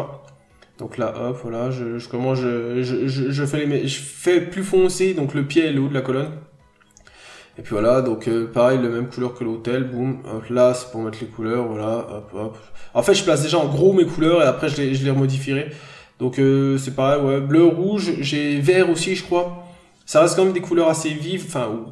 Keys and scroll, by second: 2.4 n, 3.0 b, 4.6 n, 5.7-6.1 scroll up 1, 6.2-6.5 scroll up 1, 7.5 b, 18.1 p, 18.6 b.